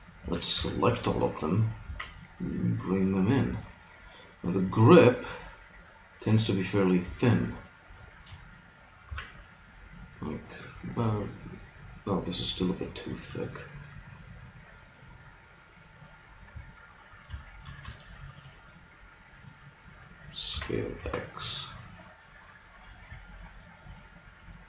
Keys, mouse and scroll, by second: 0.2 a, 0.6 a, 1.8 s, 8.4-11.2 middle drag, 9.2 z, 15.0 click, 17.2-19.6 middle drag, 20.6 s, 23.4-24.6 middle drag.